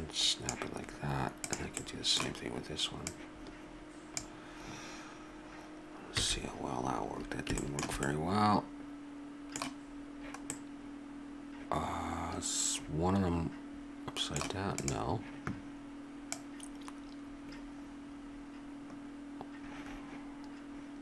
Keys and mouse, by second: 1.5 click, 1.8-3.5 middle drag, 3.5-6.2 drag, 6.2 a, 7.6 middle click, 9.1 middle click, 10.6-13.1 middle drag, 14.7-20.5 right drag.